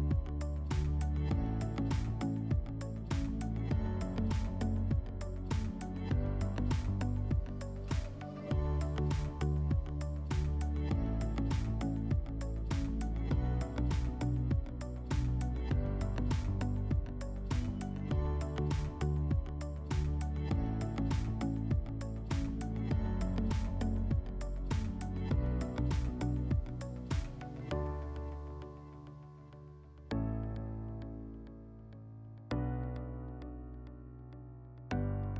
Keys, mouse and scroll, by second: 0.1 click, 0.9 click, 2.3 click, 3.3 click, 4.5 click, 6.2 click, 6.7 click, 8.5 click, 9.4 click, 11.9 click, 13.8 click, 15.1 click, 15.7 click, 17.2 click, 19.7 click, 21.9 click, 23.8 scroll, 24.6 click, 25.7 scroll, 26.0 click, 27.3 click.